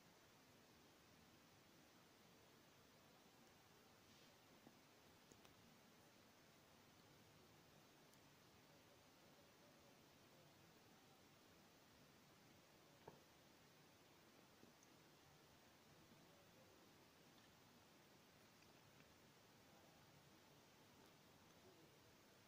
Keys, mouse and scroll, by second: 2.1 space, 2.3 scroll down 1, 4.6 shift+middle click, 5.1 scroll up 1, 5.7 click, 6.0 scroll up 1, 6.7 click, 7.3-7.8 scroll up 1, 7.8 b, 7.9 click, 8.4 space, 8.6 scroll down 1, 11.2 click, 12.2 scroll up 1, 12.8 middle click, 13.4 scroll down 1, 14.3 middle click, 14.9 scroll down 1, 15.6 click, 16.0 shift+middle click, 16.7-18.2 middle drag, 18.2 shift+e, 18.6 space, 19.8 scroll up 1, 22.2 middle click.